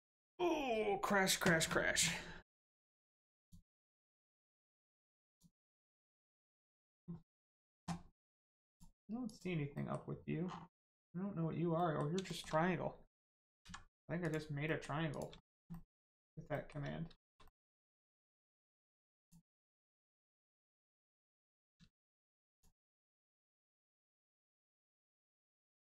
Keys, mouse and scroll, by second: 3.3 click, 8.7 click, 9.7 middle click, 10.4-11.2 scroll down 1, 11.7 middle click, 12.2 shift+middle click, 13.6 middle click, 14.2 click, 14.6 middle click, 15.1 click, 15.3 shift+middle click, 15.7 middle click, 15.7 middle click, 16.5 shift+middle click, 16.9 scroll down 1, 17.1 shift+middle click, 17.4 middle click, 18.1 shift+middle click, 19.1 click, 20.0 middle click, 21.9 shift+middle click, 22.5 middle click, 22.9-23.3 scroll down 1, 25.1 click.